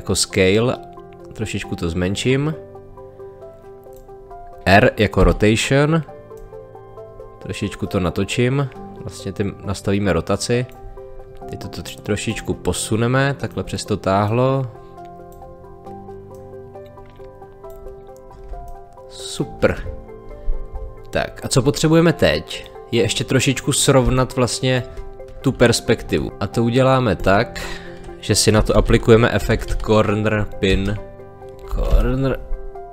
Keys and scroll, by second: 5.2 r, 18.5 space, 24.0 space, 28.5 c, 30.7 space, 31.7 p, 31.9 n.